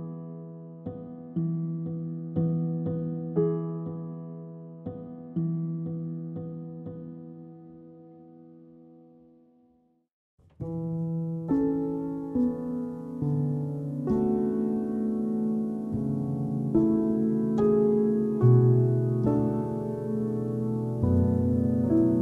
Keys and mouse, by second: 2.6 g, 3.1 ctrl+z, 3.4 Tab, 3.5 click, 3.7 Tab, 3.9 click, 4.3 click, 4.6 click, 5.0 3, 5.1 click, 5.5 x, 5.9 Tab, 6.2-7.7 drag, 7.9 Tab, 7.9 click, 8.8 click, 9.0 Tab, 9.1 click, 9.2 Tab, 9.3 click, 9.5 1, 9.6 click, 10.0 click, 10.0 g, 12.4 click, 12.4 g, 13.3 click, 13.3 g, 14.0 click, 14.0 g, 14.9 g, 16.2 click, 16.5-19.6 typing, 18.4 click, 20.7 g, 21.1 click, 21.1 g.